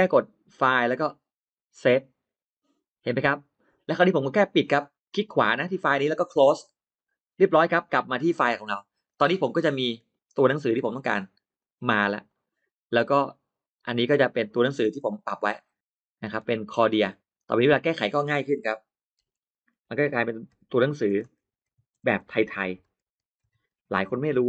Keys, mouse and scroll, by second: 0.4 click, 1.7 click, 4.8 right click, 6.4 click, 7.7 click, 9.2 click, 10.0 click, 10.2 scroll up 1, 10.5 middle click, 11.4 click, 12.1 click, 13.8 click, 14.5 click, 14.8 middle click, 15.8 middle click, 16.3 space, 16.6 click, 17.2 click, 17.4 click, 19.0-24.4 typing, 21.2 Caps_Lock.